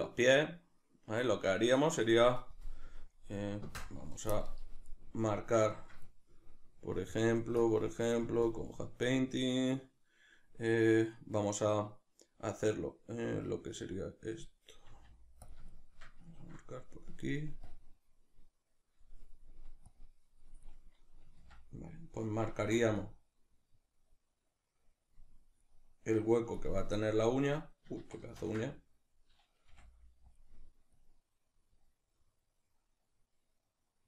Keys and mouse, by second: 4.9-8.5 middle drag, 8.5-14.9 drag, 14.9 f, 15.5 click, 15.7-17.7 shift+middle drag, 17.7-26.9 drag, 21.5 ctrl+z, 22.7 ctrl+z, 26.9-30.5 middle drag, 28.1 ctrl+z, 29.7 f, 30.5 click.